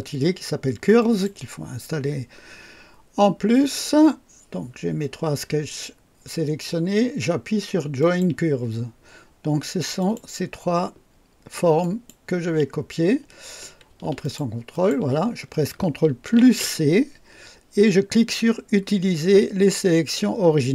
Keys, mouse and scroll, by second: 1.0 click, 8.0 click, 10.0 click, 10.8 Caps_Lock, 11.8 click, 14.2 ctrl+click, 14.7 ctrl+click, 16.4 ctrl+c.